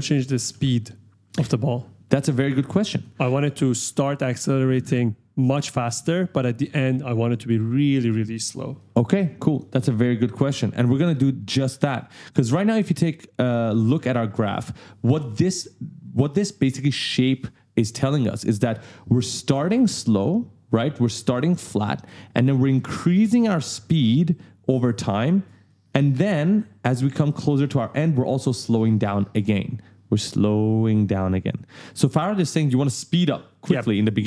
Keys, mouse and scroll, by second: 2.5 click, 3.6-5.4 typing, 3.7 right click, 5.9 click, 7.7 right click, 8.8 click, 11.1 right click, 12.8 click, 19.1 click, 22.5 click, 25.0 click, 25.9 right click, 26.0 d, 28.5 click, 34.1 right click.